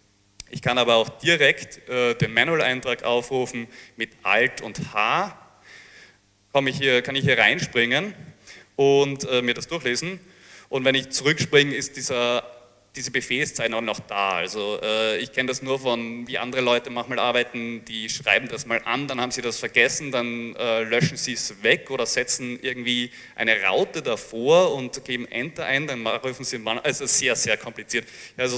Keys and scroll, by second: 0.0 b, 0.0 space, 4.8 alt+h, 10.3-12.4 typing.